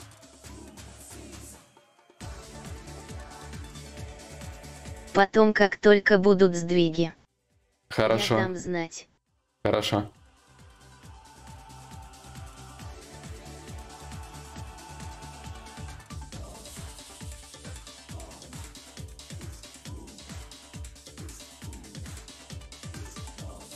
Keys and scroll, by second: 11.4 ctrl+z.